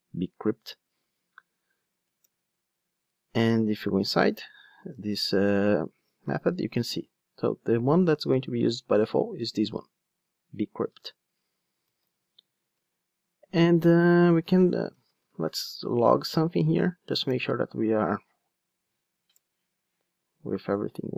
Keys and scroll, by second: 2.3 Return, 4.2 super+v, 4.9 super+z, 6.2 super+b, 11.0 ctrl+Tab, 19.4 Return.